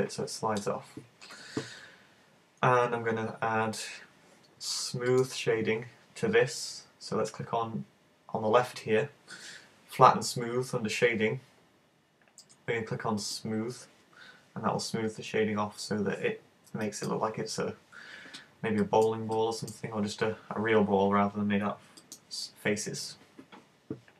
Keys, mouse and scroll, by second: 5.1 right click, 13.3 click, 16.9 middle click, 18.8 middle click, 19.4 middle click, 22.0 middle click.